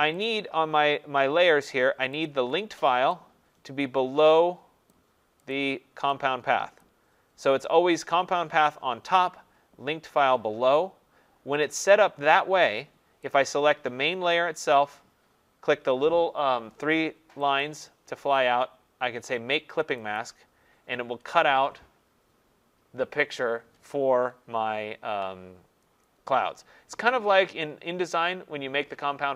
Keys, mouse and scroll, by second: 0.2 click, 2.3 click, 4.9 click, 5.6 click, 6.8 click, 13.3 click, 17.6 click, 20.2 click.